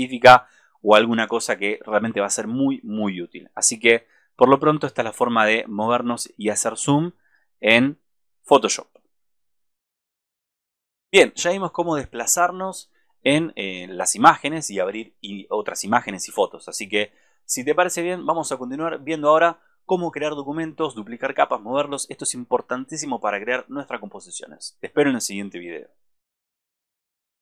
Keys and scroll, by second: 8.7 alt+space.